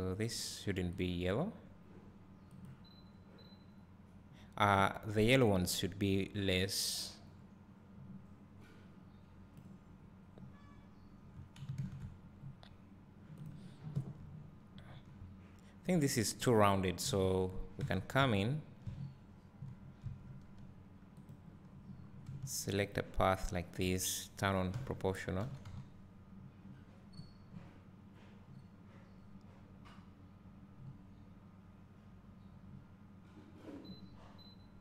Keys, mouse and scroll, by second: 1.3 click, 6.4-13.6 drag, 12.4 scroll up 1, 14.9 Tab, 15.7 Tab, 16.0 click, 17.4 KP_Decimal, 18.2 Tab, 20.3 `, 21.4-22.7 drag, 22.7-23.4 scroll down 1, 25.5 o, 25.6 g.